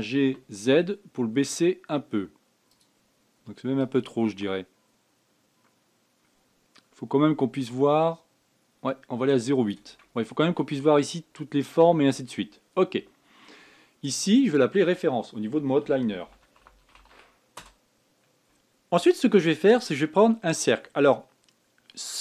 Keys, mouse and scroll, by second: 0.1 g, 4.3-7.2 drag, 14.7 click, 14.9-18.0 drag.